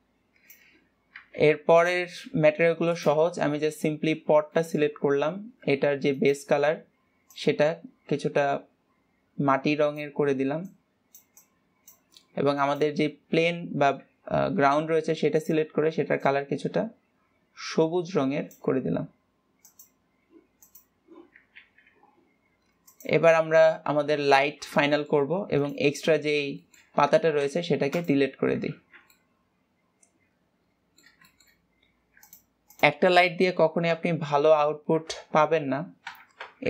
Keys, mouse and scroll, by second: 1.8 ctrl+s, 2.2 click, 4.1 scroll down 1, 4.9-5.8 shift+middle drag, 5.8 scroll up 1, 6.5 click, 13.0 click, 15.8 click, 21.1 click, 22.1 ctrl+s, 23.4 click, 23.9 scroll down 3, 24.1 middle click, 25.0-25.3 scroll down 3, 25.3 shift+middle click, 26.1 click, 26.4-27.3 middle drag, 27.3-28.5 scroll up 2, 28.5 x, 28.7 scroll down 2, 29.5-32.7 middle drag, 32.7 click, 33.2 click, 34.3 KP_Decimal, 34.6 KP_0, 34.9 KP_0, 35.3 KP_0.